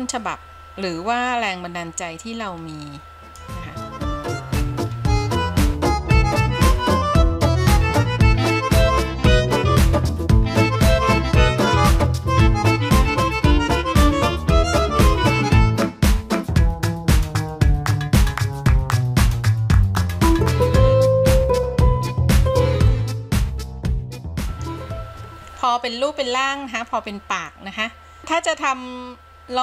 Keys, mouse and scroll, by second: 5.0-6.1 scroll up 1, 6.1 click, 7.2 click, 8.5 click, 9.0 scroll down 1, 9.1 scroll up 2, 9.7 click, 10.3 f, 10.7 f, 11.0-11.3 scroll up 1, 11.3 click, 12.5 scroll down 2, 12.8-13.1 scroll up 1, 13.1 click, 13.4 scroll down 2, 13.6 middle click, 13.9 scroll up 5, 14.1 middle click, 14.8 click, 15.5 f, 15.9 f, 17.2 click, 17.7-18.2 scroll down 5, 18.2-19.0 scroll up 7, 19.0 click, 19.5-20.0 scroll down 7, 20.0 middle click, 20.3-21.1 scroll up 3, 20.5 middle click, 21.1 middle click, 21.3 KP_3, 22.1 click, 22.8 middle click, 23.2 scroll down 6, 23.4 middle click, 23.8 scroll up 4, 24.1 middle click, 25.5-26.3 scroll down 1, 26.3-27.6 scroll up 2, 27.6-28.6 middle drag.